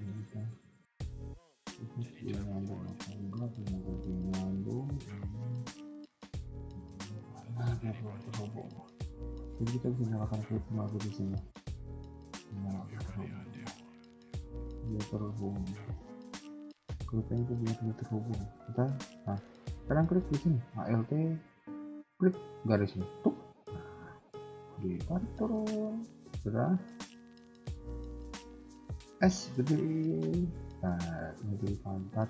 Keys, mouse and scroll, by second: 0.5 alt+click, 1.1 middle click, 4.8 click, 5.1 g, 6.7 KP_3, 7.2 KP_1, 7.6 middle click, 8.3-9.8 scroll up 2, 9.8 click, 11.2 g, 12.5 middle click, 12.8 KP_1, 13.2 middle click, 13.7 a, 14.1 click, 14.1 a, 14.4 g, 15.7 KP_1, 16.0 scroll down 2, 16.5 shift+middle click, 16.7 middle click, 17.5 alt+click, 18.0 KP_1, 18.5 g, 19.3 a, 19.4 a, 19.6 middle click, 20.2 scroll up 2, 22.9 alt+click, 23.4 KP_1, 23.6-24.0 scroll down 2, 24.0 g, 25.4 KP_3, 25.7-26.1 scroll down 3, 26.0 middle click, 26.6 KP_1, 26.7 KP_3, 27.3 shift+middle click, 27.6-28.7 scroll up 2, 29.1 s, 31.4 KP_1, 31.9 scroll up 1.